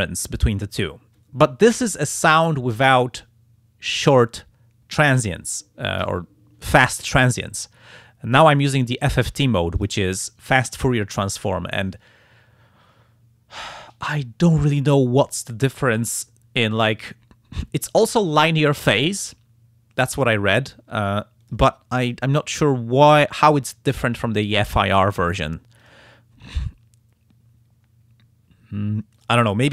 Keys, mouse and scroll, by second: 9.0 click, 9.8 click, 15.4 click, 16.9 click, 21.4 click, 25.3 click, 25.8 click, 29.2 click.